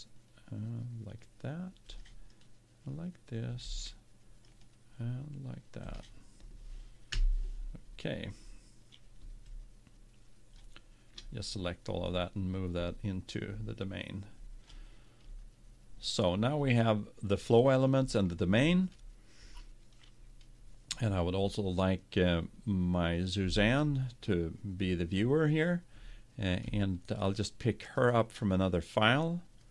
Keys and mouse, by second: 2.3-4.1 right drag, 4.5 right click, 4.7-6.2 drag, 7.1 KP_1, 9.5-11.4 drag, 12.0-13.9 drag, 27.9-29.7 drag.